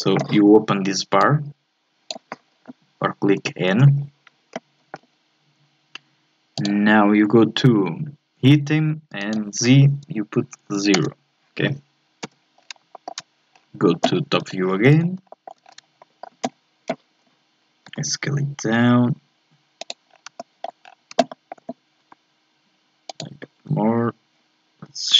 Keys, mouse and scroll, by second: 1.2-3.3 drag, 3.3 n, 3.7 n, 6.6 click, 9.2-12.2 drag, 12.5-12.9 scroll down 1, 12.9 shift+middle click, 13.5-14.0 scroll down 1, 14.0 scroll up 1, 14.4 KP_7, 15.0 scroll down 3, 15.2-15.7 shift+scroll up 4, 15.3 shift+middle click, 16.0 shift+middle click, 16.5 scroll up 1, 17.8 s, 20.1 scroll up 3, 20.4 shift+middle click, 20.8 scroll up 3, 21.3 shift+middle click, 22.0 s.